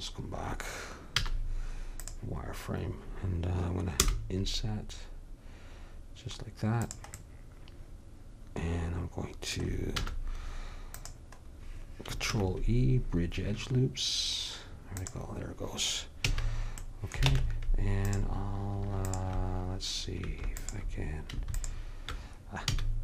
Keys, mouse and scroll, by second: 1.2 z, 4.1 i, 10.1 z, 12.4 ctrl+e, 16.3 a, 17.4 ctrl+Tab, 19.1-23.0 drag, 22.8 a.